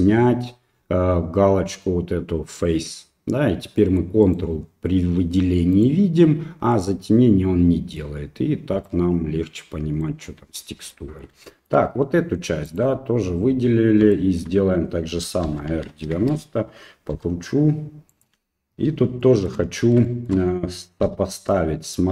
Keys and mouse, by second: 3.1 click, 3.8 middle click, 4.2 right click, 5.7 right click, 6.7-8.0 middle drag, 8.9-10.0 middle drag, 10.9 middle click, 11.5 shift+middle click, 12.7 right click, 14.2 shift+middle click, 15.4 r, 17.1 g, 19.3 shift+middle click, 20.2 shift+middle click, 21.0 g.